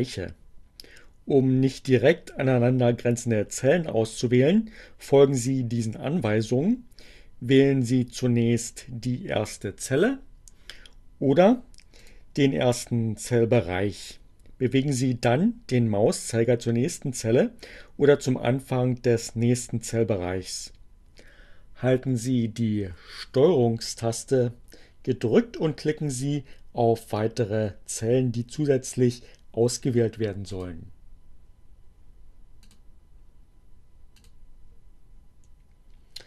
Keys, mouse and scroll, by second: 11.5 click, 29.4 ctrl+click, 32.4 ctrl+click, 33.9 ctrl+click.